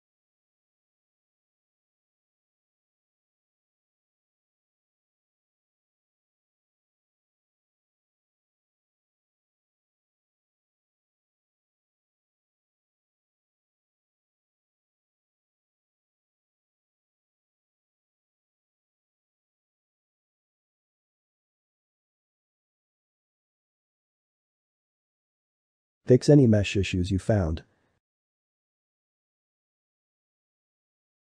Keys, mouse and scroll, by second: 0.1 click, 0.3 click, 0.5 shift+middle click, 1.1 g, 2.9 click, 3.1 click, 3.4 g, 5.3-6.8 shift+middle drag, 6.8 ctrl+r, 7.5 ctrl+b, 9.0 shift+middle click, 9.5 ctrl+r, 10.9 ctrl+b, 12.7-14.6 ctrl+middle drag, 15.2 ctrl+middle click, 15.5 Tab, 15.9-18.7 middle drag, 18.7 Tab, 18.9-20.3 middle drag, 20.6 shift+middle click, 21.0 ctrl+r, 21.9-23.8 middle drag, 23.8 ctrl+z, 24.3-25.5 shift+middle drag, 25.5 click, 25.7 click, 26.1-29.0 middle drag, 29.0 click, 29.5 shift+middle click, 30.0 ctrl+x, 30.3 click, 30.5 click, 31.0 alt+a.